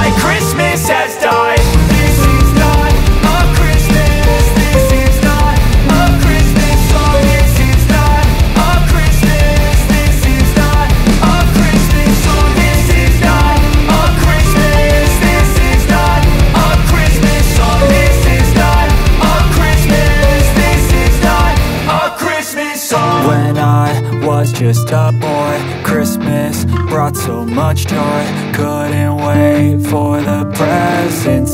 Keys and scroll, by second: 3.6 8, 3.8 0, 4.2 Return, 8.6 space, 13.3 2, 13.7 5, 20.5 5, 20.8 Return, 31.4 ctrl+Page_Down.